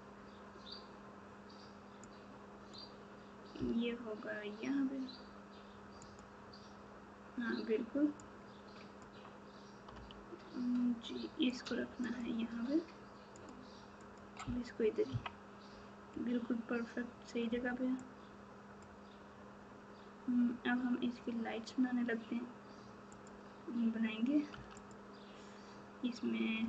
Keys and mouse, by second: 2.3 click, 8.2 click, 11.5 g, 12.1 click, 15.0 KP_3.